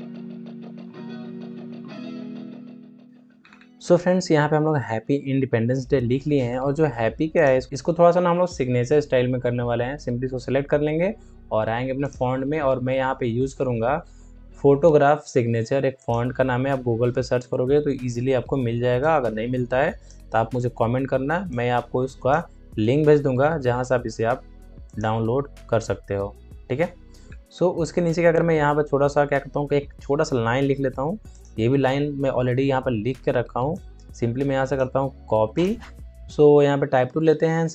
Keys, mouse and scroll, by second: 0.1 click, 0.3 ctrl+d, 0.6 click, 3.3 scroll down 1, 5.6-5.9 alt+scroll up 1, 6.1 alt+scroll up 1, 7.2 ctrl+click, 11.9 click, 12.4-14.3 scroll up 1, 15.9 click, 17.6 t, 18.9-21.4 drag, 21.4 click, 22.7 Return, 23.4 ctrl+a, 24.8 click, 25.8 ctrl+d, 26.6-27.1 alt+scroll down 1, 29.0-29.4 alt+scroll up 1, 33.6-35.2 drag, 35.2 ctrl+c, 35.4 click, 36.1 alt+scroll down 1.